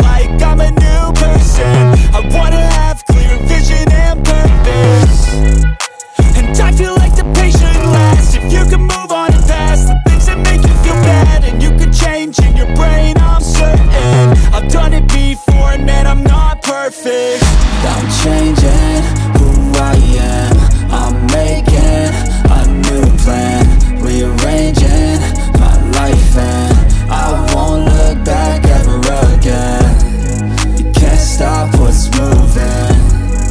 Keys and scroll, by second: 11.3 ctrl+t.